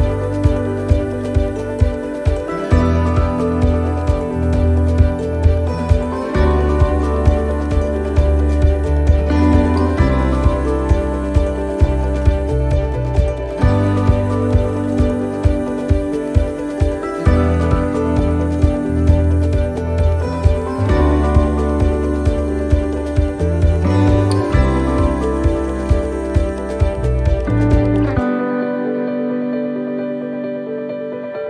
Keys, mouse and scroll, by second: 0.0 right click, 0.7 right click, 1.2 alt+shift+right click, 1.8 alt+shift+right click, 2.4 alt+shift+right click, 3.7 click, 5.9 right click, 6.4 alt+shift+right click, 6.9 right click, 7.6 right click, 8.6 click, 10.8 middle click, 11.8 scroll down 1, 12.2 middle click, 13.4 scroll up 1, 13.8 shift+middle click, 14.4 middle click, 16.4 shift+middle click, 22.1 ctrl+r, 22.1 middle click, 23.5 click, 26.4 click, 26.4 right click, 27.3 middle click, 29.2 shift+right click, 31.3 shift+right click, 31.3 middle click.